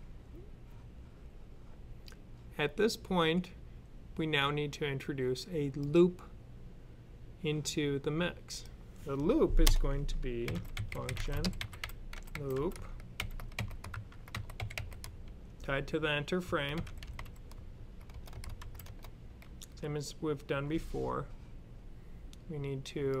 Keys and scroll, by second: 10.3-17.0 typing, 18.2-19.0 typing.